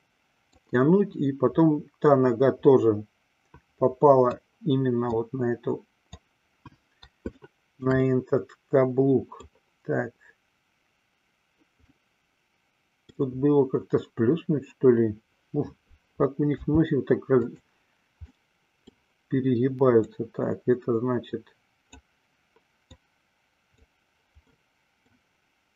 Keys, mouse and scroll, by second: 0.9-4.8 drag, 5.4-6.4 drag, 7.5 shift+middle click, 8.1-9.8 middle drag, 12.0-13.4 middle drag, 16.8 f, 18.4 middle click, 20.4-22.3 drag, 23.2-24.2 drag, 24.7 middle click.